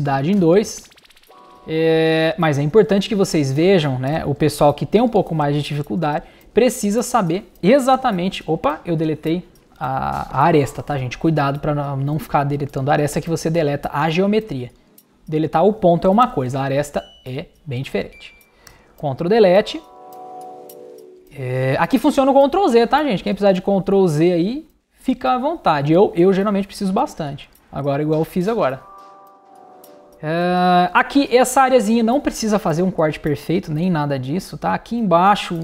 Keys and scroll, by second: 1.2 BackSpace, 2.0 super+BackSpace, 4.1 super+BackSpace, 6.0 super+BackSpace, 7.9 super+BackSpace, 10.9 super+z, 16.2 super+BackSpace, 18.7 super+BackSpace, 26.3 super+z.